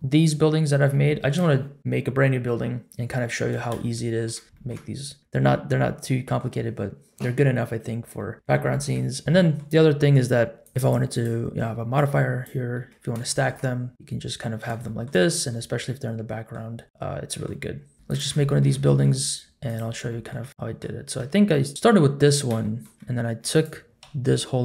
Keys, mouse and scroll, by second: 0.0 middle click, 0.0 scroll down 1, 0.6-1.0 scroll down 2, 1.0 shift+middle drag, 3.9-4.2 shift+middle drag, 4.5 shift+middle drag, 5.2 middle click, 5.2 scroll up 1, 5.6-6.2 scroll down 2, 6.0 middle click, 7.0 scroll up 1, 7.9 scroll down 1, 8.1 middle drag, 8.6 shift+middle drag, 9.2 middle click, 10.6 click, 10.8 click, 11.9 click, 12.7-13.1 middle drag, 13.3 shift+middle click, 13.6-14.6 middle drag, 14.8 shift+middle drag, 15.2 scroll down 1, 15.5-16.5 middle drag, 16.8 scroll up 2, 16.8-17.5 middle drag, 17.6-17.9 scroll down 2, 18.0 shift+click, 18.4 shift+middle drag, 18.8 middle click, 19.7 click, 20.1 shift+middle drag, 20.5-20.8 middle drag, 21.2 Tab, 21.7 shift+middle click, 21.7 click, 21.7 scroll up 2, 22.6 shift+middle click, 23.5 click, 24.0 l.